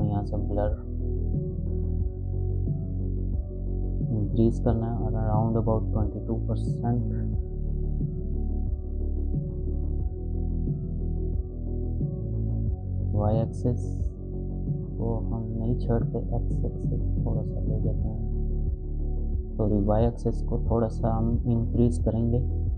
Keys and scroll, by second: 5.7 2, 6.5 Return.